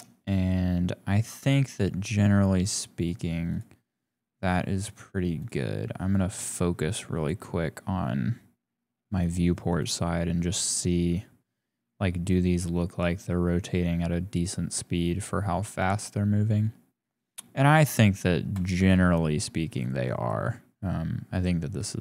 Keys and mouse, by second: 2.8-3.9 drag, 5.4 click, 6.1 click, 7.3 click, 9.9 click, 19.4 KP_0, 20.3 click, 21.4 middle click.